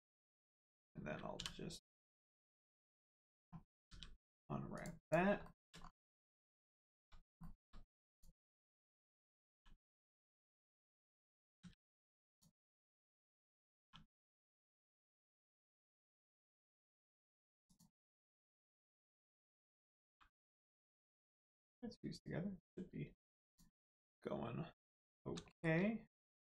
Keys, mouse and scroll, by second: 1.3 u, 1.9 scroll down 1, 2.7 shift+middle click, 3.9 g, 4.7 click, 5.2 click, 5.4 shift+middle click, 5.8 scroll up 1, 6.7 shift+middle click, 8.1 click, 9.4 r, 10.7 right click, 11.6 a, 12.3 click, 13.8 r, 17.6 click, 20.0 g, 21.4 right click, 22.8 g, 23.4 click, 25.4 shift+middle click.